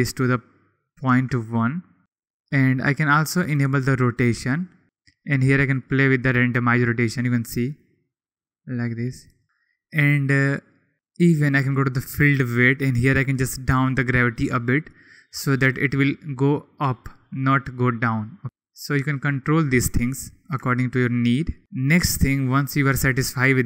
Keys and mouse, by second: 2.7 click, 3.4-4.8 drag, 5.7-7.0 drag, 7.5 click, 8.6 click, 9.2 click, 11.4 click, 13.2-14.4 drag, 15.6 click, 17.8 click, 21.6 ctrl+s, 22.6 click.